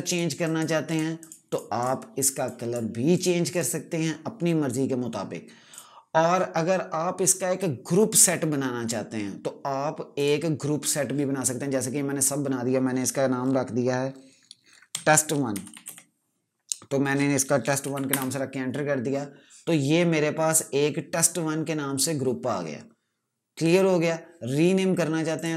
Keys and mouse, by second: 10.0 click, 14.8-16.3 typing, 17.7 typing, 18.0 Return, 20.4 click, 25.2 click.